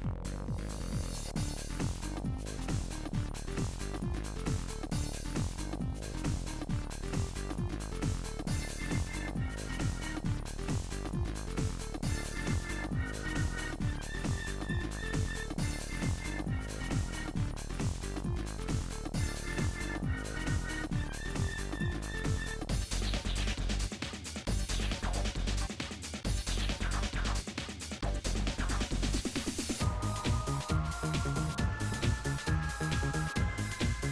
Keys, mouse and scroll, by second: 0.5 middle click, 7.2-8.4 middle drag, 8.4 click, 8.6 shift+middle click, 9.7 scroll up 2, 9.8 middle click, 10.4 scroll down 2, 10.7 click, 10.8-12.1 middle drag, 12.1 scroll up 1, 12.7 3, 12.8 click, 13.5-14.5 shift+middle drag, 14.5 g, 18.3 middle click, 18.7 g, 19.4 middle click, 19.9 p, 20.7 Tab, 21.0 click, 21.4 Tab, 21.9 a, 22.2-27.1 middle drag, 27.1 click, 28.0 e, 29.3 a, 29.9 shift+click, 30.6 s, 31.1-32.2 shift+middle drag, 32.2 scroll up 4, 32.4 scroll down 1, 32.5-33.9 shift+middle drag, 33.9-34.1 drag.